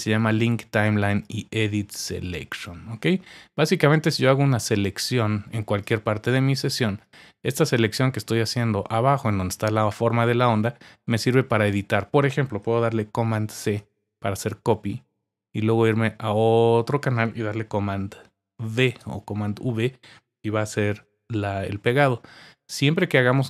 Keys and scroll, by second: 13.8 super+c, 18.8 super+v, 21.0 super+z.